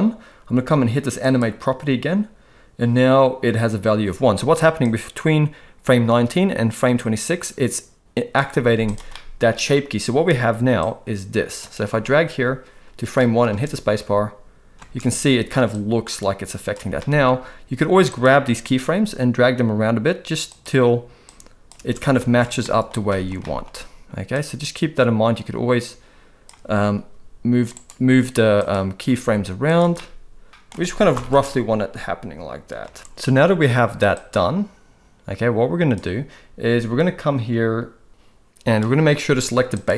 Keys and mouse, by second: 1.2 click, 4.8-8.4 drag, 8.6 z, 9.1-9.5 middle drag, 10.8-11.6 drag, 11.9 space, 13.2 middle click, 13.6 space, 15.2 space, 15.7-16.7 drag, 17.0 middle click, 18.1 click, 18.7 g, 21.3 click, 22.6 middle click, 22.6 space, 23.1 shift+middle drag, 23.4 middle click, 24.3 click, 26.9 g, 28.5 click, 29.1 g, 29.9-30.7 middle drag, 30.5 space, 30.7 space, 31.1 shift+Left, 31.3 space, 32.8 space, 34.1-35.9 drag.